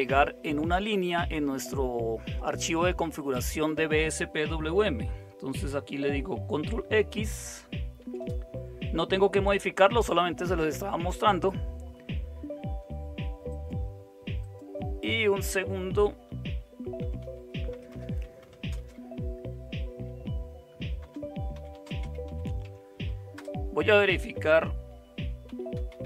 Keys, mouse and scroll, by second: 7.9 ctrl+x, 16.8-19.0 typing, 21.0-23.8 typing, 25.2-26.0 typing.